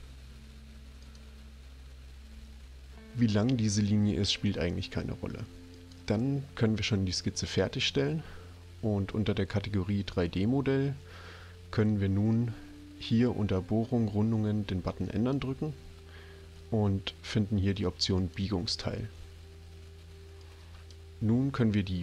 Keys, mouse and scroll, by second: 1.0 click, 5.7 click, 10.1 click, 15.2 click, 18.1 click, 20.4-20.9 drag.